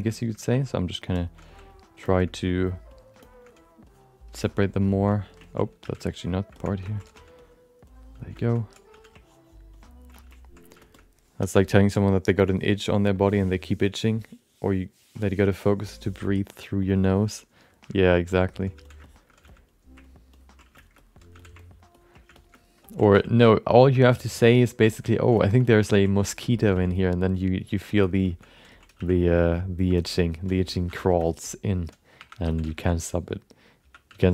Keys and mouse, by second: 0.1 alt+shift+middle click, 0.5 f, 0.8 click, 1.1 alt+shift+middle click, 1.4 click, 1.7 click, 2.0 alt+shift+middle click, 2.2 alt+middle click, 2.5 click, 2.9 click, 3.2 alt+shift+middle click, 3.5 click, 3.8 click, 4.4 ctrl+alt+middle click, 4.6 alt+middle click, 4.8 alt+shift+middle click, 5.1 alt+middle click, 5.4 ctrl+middle click, 5.8 f, 6.0 shift+click, 6.5 shift+middle click, 6.8 ctrl+alt+middle click, 7.1 f, 7.4 click, 7.9 click, 8.3 alt+shift+middle click, 8.5 alt+middle click, 9.0 f, 9.2 click, 9.7 click, 10.1 f, 10.3 click, 10.8 alt+shift+middle click, 10.9 middle click, 18.0 alt+shift+middle click, 18.3 alt+middle click, 18.7 f, 19.0 alt+shift+middle click, 19.4 f, 19.7 click, 20.0 ctrl+click, 20.3 ctrl+click, 20.7 alt+shift+middle click, 21.0 alt+middle click, 21.4 f, 21.6 ctrl+click, 21.9 ctrl+click, 22.3 shift+middle click, 22.5 middle click, 22.8 ctrl+middle click, 23.1 f, 23.4 click, 23.7 click, 23.9 alt+shift+middle click, 24.1 middle click, 24.5 click, 24.8 shift+middle click, 25.0 alt+middle click, 25.3 shift+middle click, 25.6 middle click, 25.9 ctrl+middle click, 26.2 alt+shift+middle click, 26.4 alt+middle click, 26.7 f, 26.9 click, 27.3 click, 27.6 click, 27.9 shift+middle click, 28.0 middle click, 28.2 shift+middle click, 28.4 alt+middle click, 28.7 ctrl+alt+middle click, 28.9 f, 29.2 click, 29.4 click, 29.9 shift+middle click, 30.1 middle click, 30.8 2, 31.2 alt+shift+middle click, 31.4 alt+middle click, 32.2 1, 32.4 f, 32.7 shift+middle click, 32.8 alt+middle click, 33.8-34.3 typing, 34.2 alt+shift+middle click.